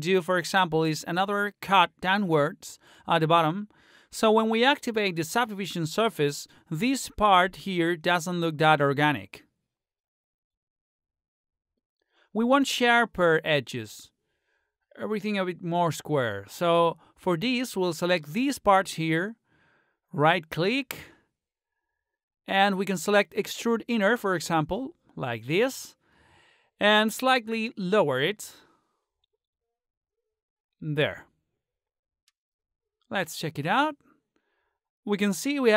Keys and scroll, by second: 17.9 space.